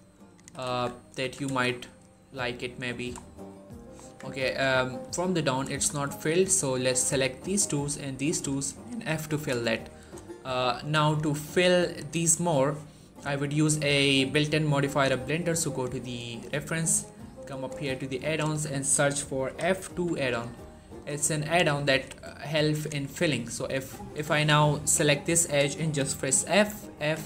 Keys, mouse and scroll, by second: 0.0-1.1 typing, 0.0 click, 0.9 click, 1.3 Tab, 1.6-2.7 scroll down 1, 2.8 shift+middle click, 3.1-3.7 middle click, 3.9 Tab, 4.2-5.1 middle click, 4.9 scroll up 1, 5.2 middle click, 5.5 shift+middle click, 6.2 click, 6.8 shift+click, 9.2 f, 10.9 click, 19.3-19.7 typing, 20.1 click, 24.2 middle click, 26.8-27.2 typing.